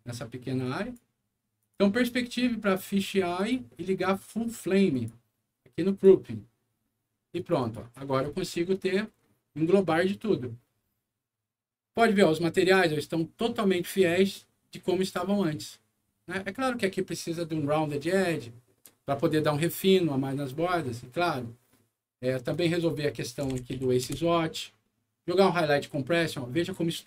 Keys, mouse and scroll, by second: 0.5 click, 1.5 click, 3.3 click, 4.8 click, 5.8 click, 7.3 click, 7.5 click, 22.4 click, 22.6 click, 23.4 KP_0, 23.4 KP_Decimal, 23.7 KP_7, 24.0 Return, 26.2 scroll up 1, 26.9 middle click.